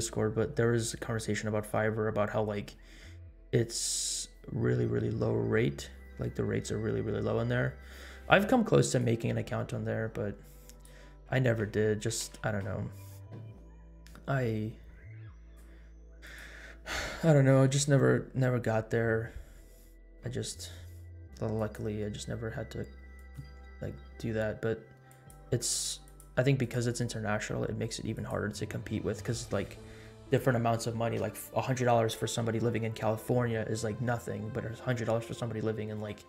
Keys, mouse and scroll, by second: 9.2-11.4 drag, 12.7 ctrl+s, 15.4 click, 16.3 click, 17.9-18.2 scroll up 2, 19.0-20.1 scroll up 6, 21.4 scroll up 1, 21.5 click, 23.1 click, 25.0 click, 26.0 click, 26.6 click, 28.1 click.